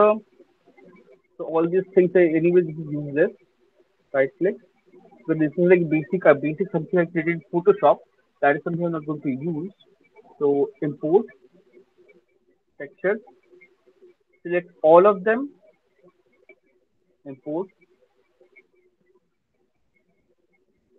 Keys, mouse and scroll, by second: 3.4 click, 10.9 click, 12.6 click, 12.9 click, 13.6 click, 14.4 shift+click, 14.5 shift+click, 15.7 click.